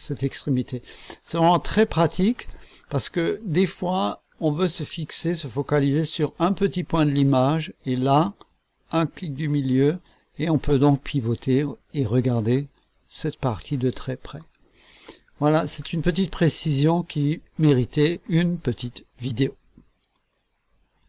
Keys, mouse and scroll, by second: 0.7 scroll down 1, 1.6 right click, 2.7-3.0 scroll up 1, 3.4 right click, 4.2-4.6 scroll up 2, 4.8-5.3 scroll up 2, 9.3 middle click, 10.0-11.8 drag, 11.8-12.2 scroll up 2, 12.4 scroll up 2, 12.8-14.6 drag, 14.6-15.2 scroll down 1, 15.3-15.6 scroll down 1, 15.8-16.2 scroll down 1, 16.6 scroll down 1, 20.1 click, 21.0 click.